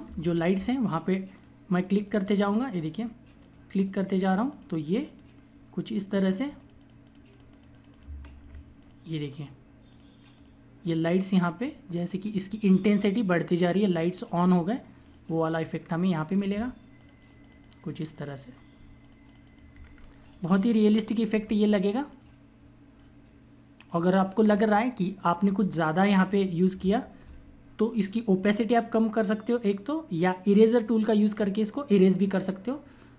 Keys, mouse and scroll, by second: 0.0-0.4 typing, 1.2 click, 8.2 ], 8.7 click, 16.4 [, 16.9 click, 18.6-19.8 typing, 18.9 click, 20.0 click, 21.2 [, 21.6 click, 28.4 click.